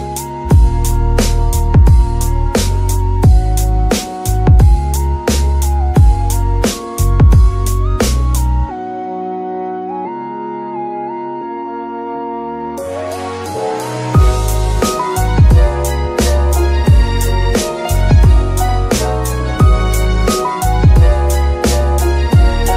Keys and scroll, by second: 11.9 ctrl+c, 12.3 ctrl+v.